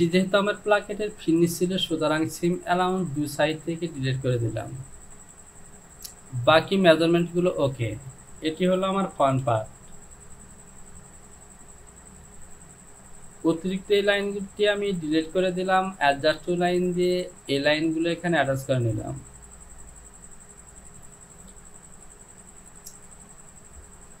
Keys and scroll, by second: 0.0 Home, 5.4 j, 9.4 Home, 11.9 Delete.